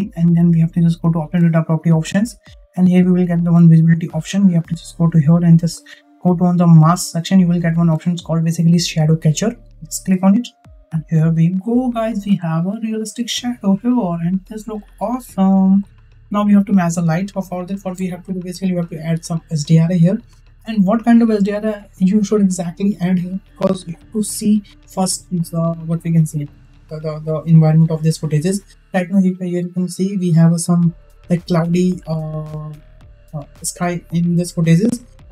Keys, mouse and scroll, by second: 1.6 click, 3.5 click, 9.8 click, 10.7 click.